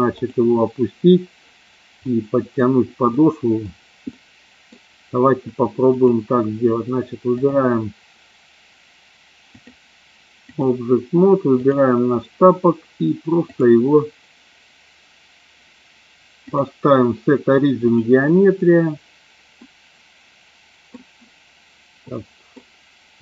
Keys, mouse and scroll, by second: 2.0 middle click, 3.1 middle click, 4.1 middle click, 5.8 click, 7.3 click, 9.3-10.6 drag, 11.6 click, 13.5 click, 16.3-18.0 drag, 19.6-20.8 middle drag, 22.1 middle click.